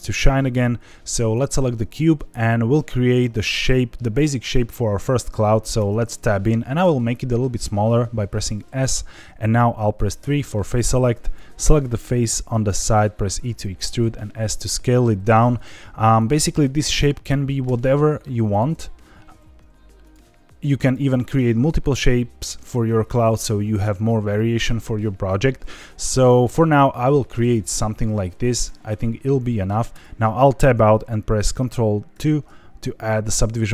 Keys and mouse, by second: 1.2 click, 5.7 Tab, 6.8 s, 8.8 click, 10.1 3, 11.2 click, 12.7 e, 13.8 click, 14.0 s, 15.5 click, 16.1 click, 17.6 e, 18.5 click, 18.7 s, 19.3 e, 20.0 click, 20.2 s, 20.7 click, 25.6 middle click, 26.7 e, 27.3 click, 27.5 s, 28.5 click, 28.8 middle click, 29.9 Tab, 32.1 ctrl+2.